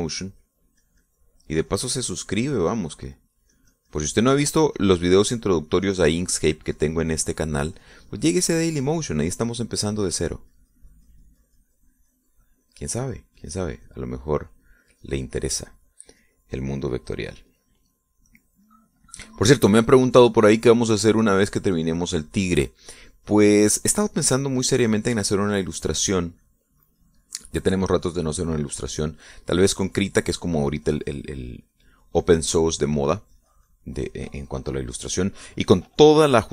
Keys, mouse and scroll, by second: 11.6-20.7 drag, 20.8 middle click, 21.7-27.5 drag, 27.6-36.5 drag.